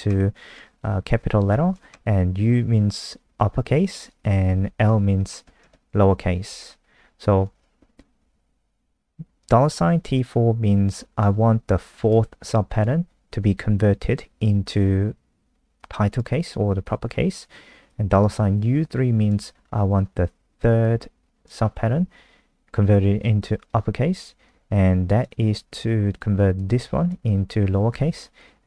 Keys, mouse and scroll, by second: 0.2 Right, 0.4 Right, 0.7 Right, 0.9 Right, 1.5 Left, 1.8 shift+Right, 4.4 Right, 4.7 Right, 4.8 Right, 5.4 Right, 7.6 Left, 7.8 Left, 7.9 Left, 9.4 click.